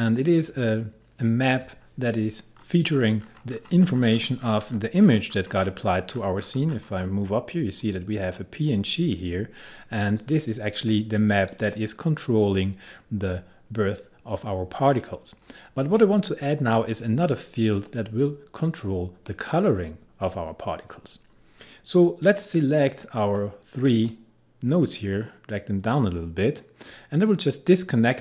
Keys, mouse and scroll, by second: 2.6-3.3 scroll up 1, 7.8 click, 10.2 click, 22.4-28.2 drag.